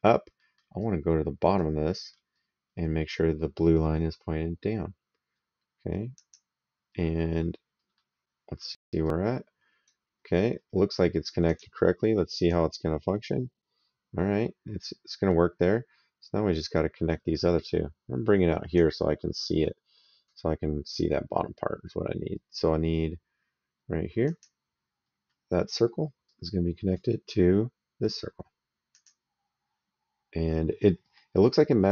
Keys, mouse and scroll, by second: 0.2 middle click, 0.6 right click, 1.7 middle click, 6.0 click, 7.8 middle click, 8.7 right click, 11.2 click, 19.2 right click, 24.0 click, 26.0 right click, 28.7 click, 30.9 middle click.